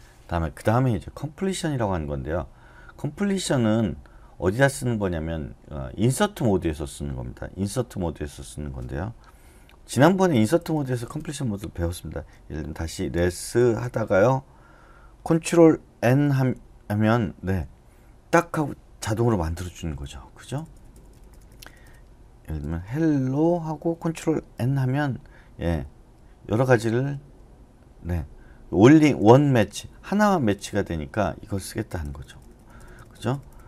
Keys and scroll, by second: 10.6 o, 12.7-14.1 typing, 16.0 ctrl+n, 19.7-23.9 typing, 24.5 ctrl+n, 32.0-33.5 typing.